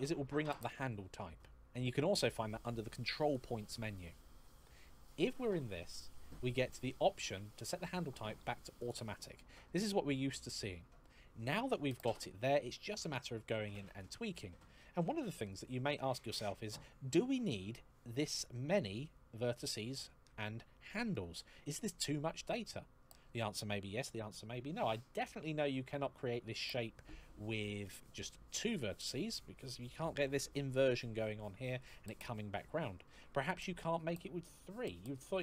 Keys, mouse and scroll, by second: 3.0 click, 8.6 click, 16.5 shift+middle click, 18.3 scroll down 1, 19.8 shift+middle click, 22.4 shift+middle click, 26.8 shift+middle click.